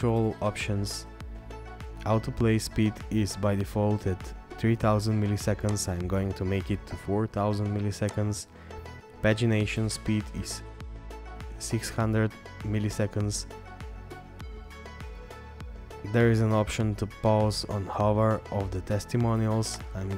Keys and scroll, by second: 0.1-0.9 scroll down 1, 9.5-11.5 scroll down 1, 15.3-16.9 scroll down 1.